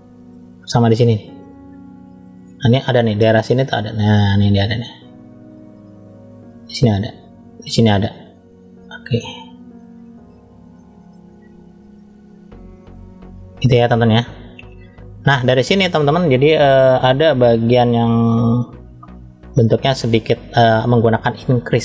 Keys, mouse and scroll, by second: 0.3 click, 2.5 click, 5.1 click, 5.6 click, 6.0 click, 7.4 click, 9.3 click, 10.0 click, 11.3 click, 11.7 click, 12.0 click, 12.5 click, 13.1 middle click, 14.1-14.6 scroll up 1, 14.6 middle click, 21.3 click.